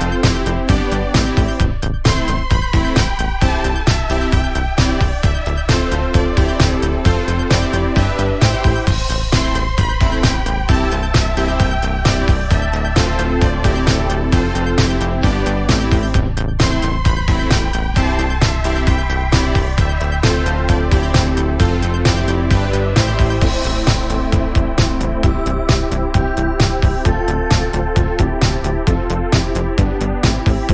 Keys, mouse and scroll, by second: 1.3 click, 2.0 3, 2.9 alt+click, 3.2 scroll down 2, 3.6 middle click, 4.3 alt+z, 4.6 scroll up 2, 5.4 q, 7.3-9.0 middle drag, 9.0 Tab, 9.2 click, 9.4-9.8 scroll down 9, 9.8-10.4 middle drag, 10.4 click, 10.8-13.4 scroll up 7, 13.6-14.4 scroll down 3, 14.4 KP_7, 15.1 KP_3, 15.8 scroll down 1, 16.1-16.8 shift+middle drag, 16.8 scroll down 2, 17.7 click, 19.7-20.5 shift+middle drag, 20.5 scroll up 1, 21.2 shift+c, 21.8 shift+middle drag, 22.0-22.3 shift+scroll up 6, 22.6-23.0 shift+middle drag, 23.0-23.6 scroll down 3, 24.3-25.6 drag, 25.6 r, 29.4 scroll down 1, 29.6-30.6 middle drag, 30.6 KP_Decimal.